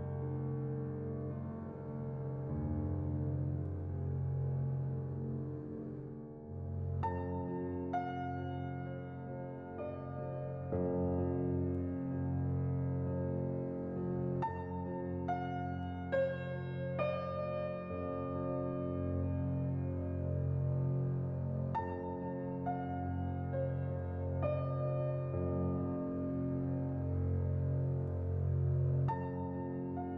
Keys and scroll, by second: 2.3 a, 7.2 a, 23.4 n, 28.8 z.